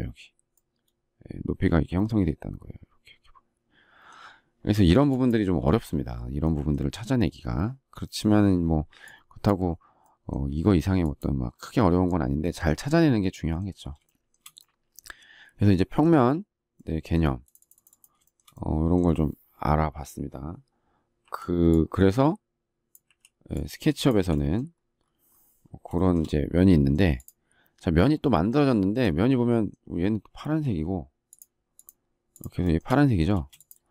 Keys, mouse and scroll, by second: 10.7 space, 14.0 shift+middle click, 18.3 shift+middle click, 21.2 Delete, 23.0 Delete, 25.9 shift+middle click, 28.6 shift+middle click, 32.6 shift+middle click, 32.7 shift+double middle click, 33.3 space.